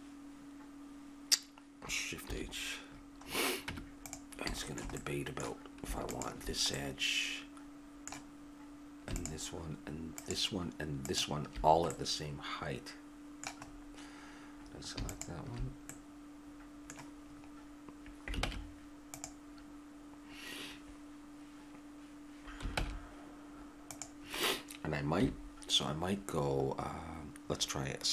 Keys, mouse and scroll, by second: 2.2 shift+h, 3.7 Tab, 6.1-9.1 drag, 11.9 click, 12.6-15.1 middle drag, 15.1-16.5 drag, 16.5-18.4 middle drag, 18.4 ctrl+Tab, 22.8 ctrl+Tab, 25.2 KP_3.